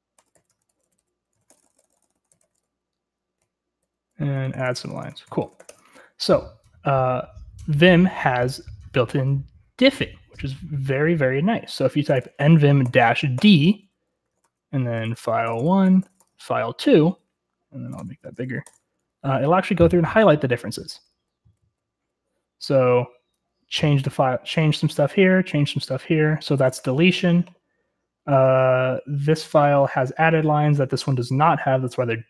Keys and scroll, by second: 0.0-6.1 typing, 11.8-16.7 typing, 18.0 super+m, 18.6 Return, 20.9-24.2 typing.